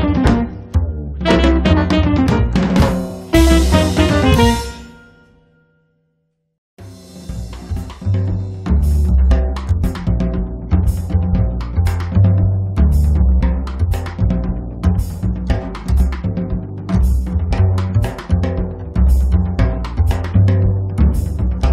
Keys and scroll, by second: 1.6 space, 4.8 space, 5.4 Escape, 11.6 space, 14.7 space, 15.7 Escape, 16.7 Escape, 19.0 space, 21.1 space.